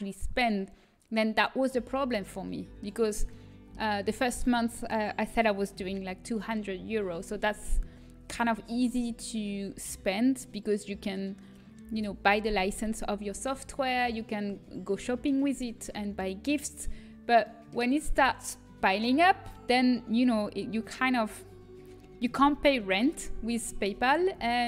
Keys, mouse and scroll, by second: 2.1-5.7 middle drag, 15.1-19.4 middle drag.